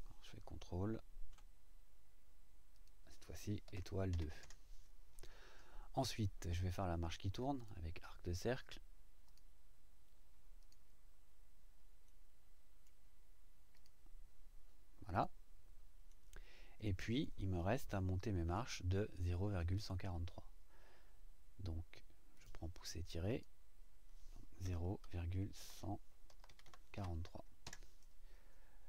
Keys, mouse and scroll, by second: 2.7 click, 4.1 KP_2, 4.4 KP_Enter, 7.6 click, 9.3 click, 10.6 click, 12.1 middle click, 13.7 click, 15.1 click, 16.1-17.4 middle drag, 17.9-18.7 shift+right drag, 18.9 shift+right click, 19.5-20.1 middle drag, 22.3 click, 23.3 click, 24.6-26.9 typing, 27.6 KP_Enter.